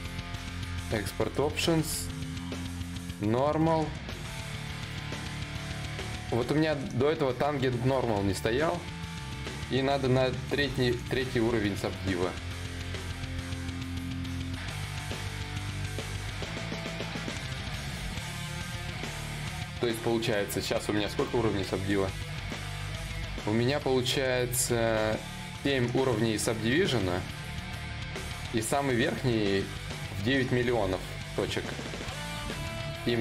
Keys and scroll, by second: 12.8 d, 20.5 ctrl+v.